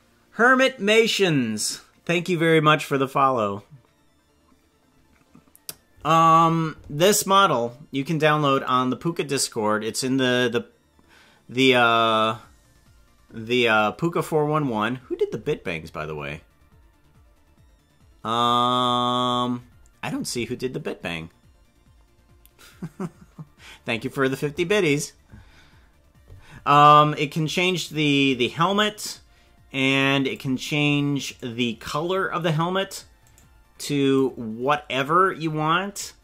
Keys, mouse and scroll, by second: 8.6-11.8 drag, 27.4-30.5 drag, 31.3 right click, 33.3 right click, 34.1-36.2 drag.